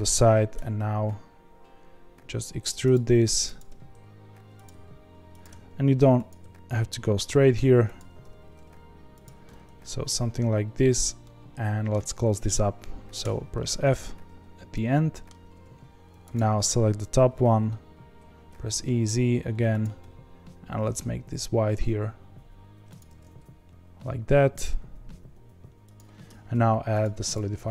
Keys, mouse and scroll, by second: 0.5 e, 4.7 s, 5.4 e, 6.4 s, 8.2 g, 9.4 middle click, 10.4 2, 11.2-13.2 middle drag, 13.2 f, 14.7-16.3 middle drag, 16.3 alt+click, 18.4 e, 23.1 g, 26.2 Tab.